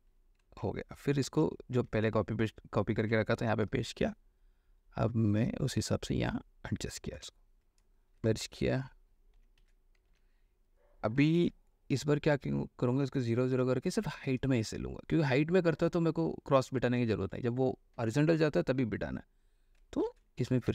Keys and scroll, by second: 0.9 ctrl+d, 1.4 ctrl+v, 1.9 ctrl+v, 3.5 ctrl+t, 7.4 Return, 9.3-10.9 typing, 11.6 ctrl+h, 13.7 0, 20.2 ctrl+v.